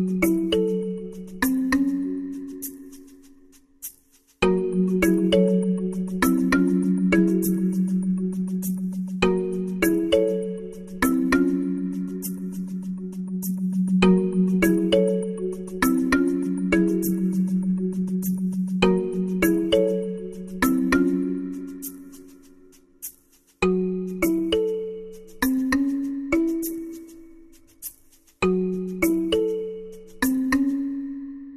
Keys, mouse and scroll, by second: 0.7 KP_7, 5.0-6.3 middle drag, 6.3-8.5 drag, 9.7-11.2 drag, 12.9 alt+r, 14.4 KP_0, 16.2 shift+z, 19.9-21.4 drag, 22.4 click.